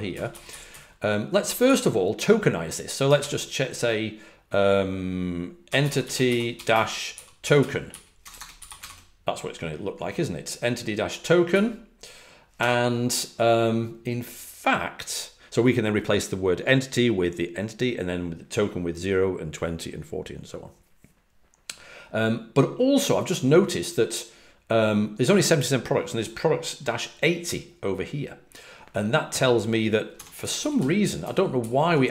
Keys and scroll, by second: 0.0-1.6 typing, 5.3-9.2 typing, 30.0 Escape, 30.2-32.1 typing.